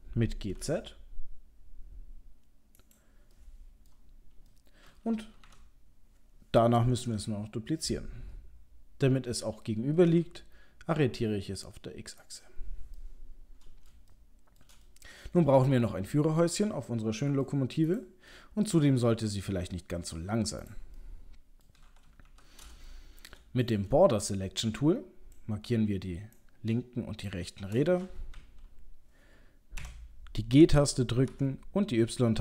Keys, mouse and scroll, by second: 0.6 g, 3.3 middle click, 4.1-4.9 scroll down 3, 4.5 middle click, 5.4 KP_7, 7.0 shift+d, 13.0 middle click, 14.1 shift+middle click, 14.9 middle click, 15.2 middle click, 15.4 middle click, 15.5 shift+middle click, 15.8 ctrl+middle click, 17.1 middle click, 17.9 click, 18.3 middle click, 20.6 click, 21.0 middle click, 22.2 KP_7, 22.9 shift+middle click, 23.6 click, 24.2 shift+click, 26.4 click, 28.3 KP_3, 29.8 g.